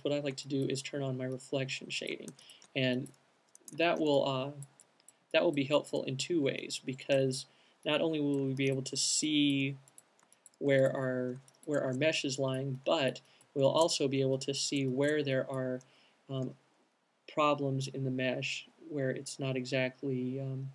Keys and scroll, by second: 2.3 alt+c, 2.6 super+z, 6.1 q, 8.7 c, 10.1 q, 16.6 /.